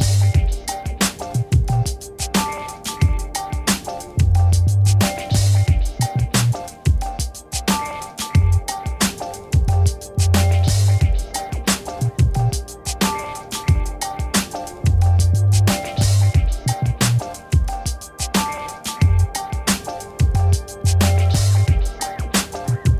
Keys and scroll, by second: 2.8 Return, 3.3 z, 5.3 v, 6.1 ctrl+-, 11.7 ctrl+-, 13.7 ctrl++, 14.3 space, 15.5 ctrl++, 17.1 ctrl+-.